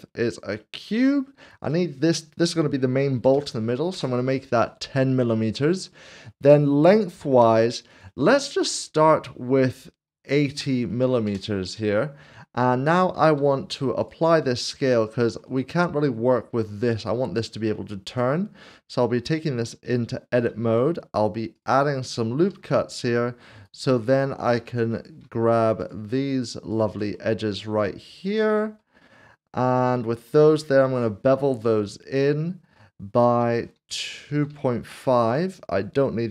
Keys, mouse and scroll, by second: 0.0 scroll up 1, 1.6 click, 3.1 typing, 3.9 Return, 7.9 Return, 10.3 typing, 11.2 Return, 12.1 scroll down 1, 13.2 ctrl+a, 14.0 click, 14.6 scroll up 1, 15.0 shift+middle click, 15.6 middle click, 18.1 middle click, 20.5 ctrl+r, 21.5 click, 22.5 ctrl+r, 23.0 click, 23.5 right click, 25.0 click, 25.8 shift+click, 27.1 middle click, 28.3 shift+click, 28.9 middle click, 30.8 ctrl+b, 34.5 typing, 35.5-36.3 scroll.